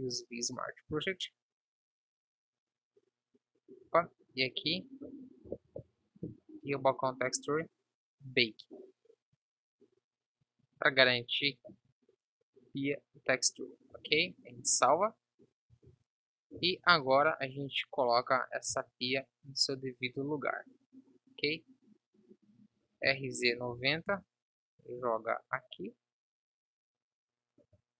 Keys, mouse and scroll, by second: 10.9-11.7 drag, 13.6-14.2 drag, 14.2 ctrl+s, 15.9 Tab, 16.9 KP_7, 18.9 z, 22.9 r, 25.2 g.